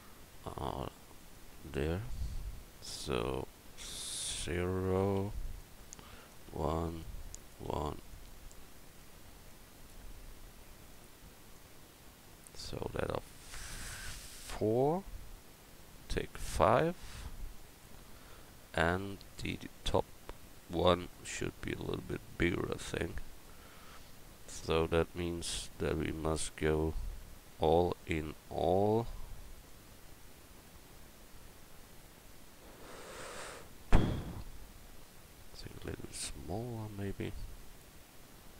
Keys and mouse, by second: 3.5 0.